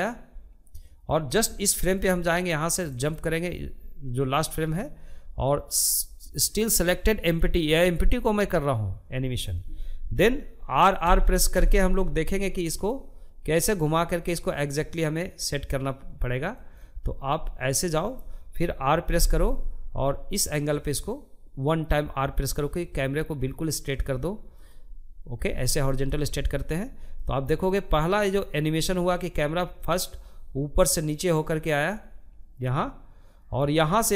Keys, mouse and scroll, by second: 1.1-4.1 drag, 4.8-7.9 drag, 9.5 r, 15.7-17.5 middle drag, 17.5 r, 25.6-34.1 drag.